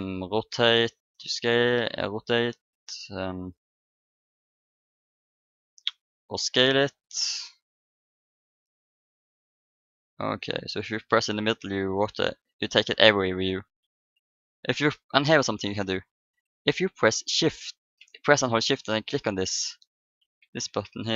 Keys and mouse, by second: 6.6-10.4 drag, 10.9-13.7 drag, 19.1-21.1 drag.